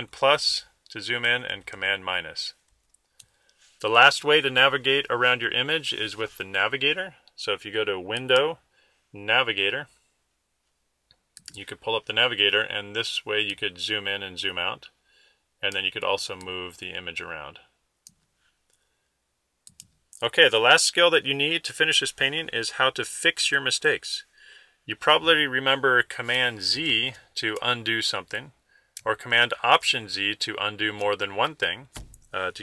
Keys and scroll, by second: 1.8 super++.